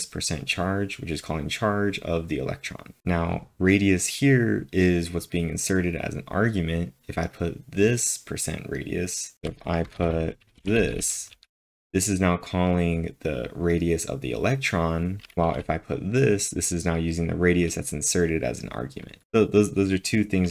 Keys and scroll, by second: 9.1-10.8 typing, 15.1-15.8 typing.